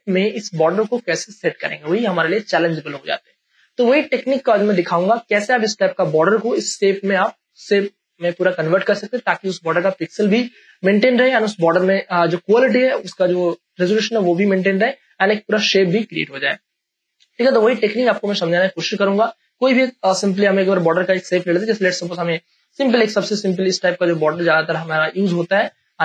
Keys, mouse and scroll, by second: 20.3 Delete, 22.4-26.0 drag.